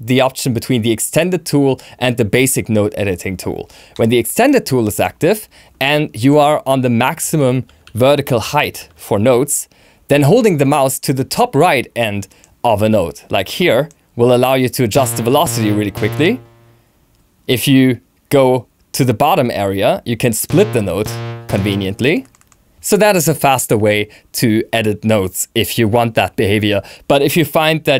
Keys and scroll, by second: 8.0 shift+e.